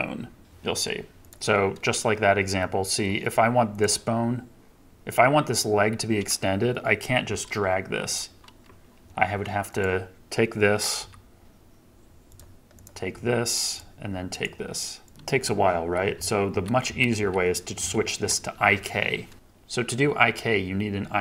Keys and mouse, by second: 7.2 g, 8.9 Escape, 10.9 r, 13.0 r, 13.7-14.4 drag, 14.5 r, 15.0 click, 15.8 ctrl+z, 16.1 ctrl+z, 16.8 ctrl+z, 17.1 ctrl+z.